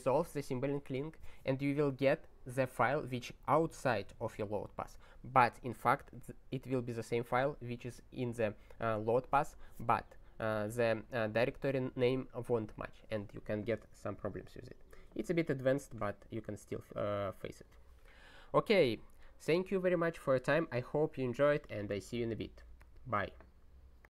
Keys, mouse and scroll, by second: 14.6 scroll down 11, 16.7 scroll down 2.